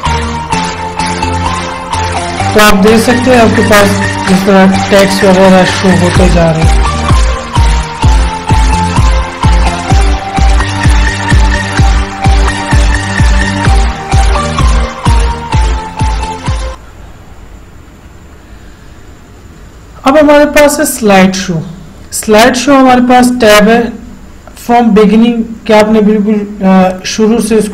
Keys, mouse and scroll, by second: 21.2 click, 27.2 click.